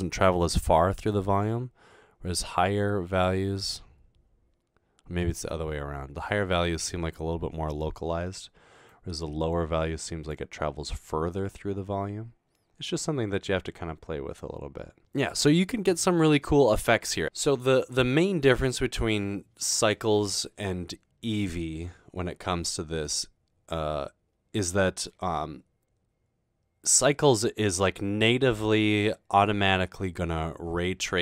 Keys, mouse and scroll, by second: 1.1-3.2 drag, 8.9-10.3 drag.